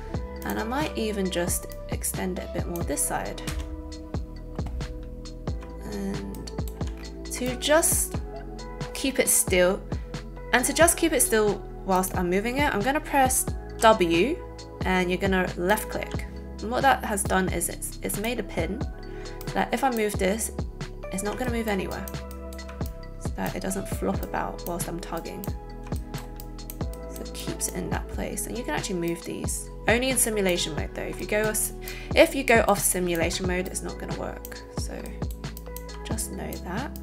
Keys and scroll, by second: 0.7 a, 13.8 w.